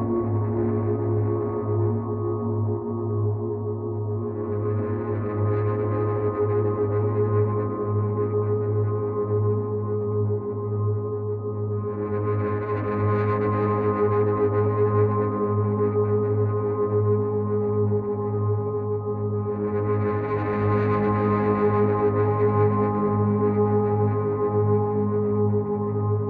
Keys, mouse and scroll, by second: 4.2 shift+click, 7.9 click, 14.4 click, 18.8 Left, 21.0 click, 25.0 click.